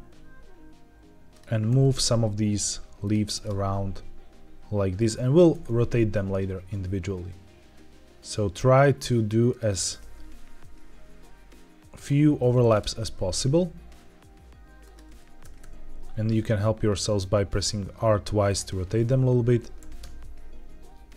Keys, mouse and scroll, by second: 1.2 ctrl+click, 1.6 alt+d, 2.9 ctrl+click, 3.3 alt+d, 4.9 ctrl+click, 5.5 alt+d, 9.4 ctrl+click, 9.7 r, 9.9 r, 11.8 click, 12.5 alt+d, 14.7 ctrl+click, 15.3 r, 15.5 r, 18.4 click, 19.7 alt+d.